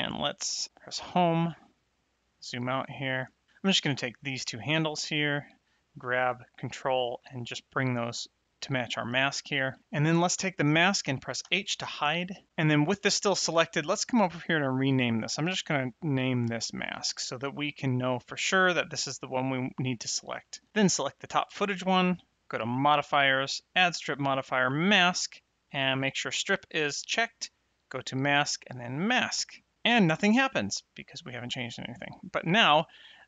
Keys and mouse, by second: 0.9 Home, 1.7 ctrl+middle click, 2.6 middle click, 3.8 click, 4.8 shift+click, 5.8 g, 6.9 ctrl+click, 10.2 click, 11.4 h, 14.5 click, 16.2 shift+m, 16.8 s, 16.9 k, 21.3 click, 22.7 click, 27.5 click, 28.6 click.